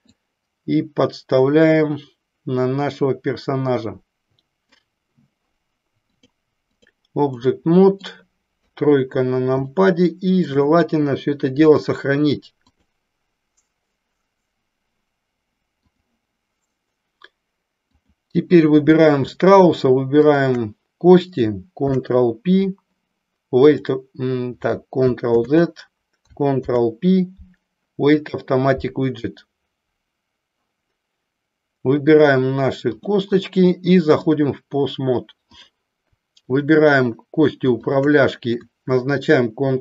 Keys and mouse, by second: 0.1-4.6 drag, 6.1 click, 7.4 middle click, 8.6 KP_3, 9.8 shift+middle click, 11.8-13.1 drag, 17.9 click, 20.1 shift+click, 21.8 ctrl+p, 25.3 ctrl+z, 26.6 ctrl+p, 32.9 click, 34.1-35.8 drag, 36.4-37.3 drag, 37.8-38.5 shift+drag.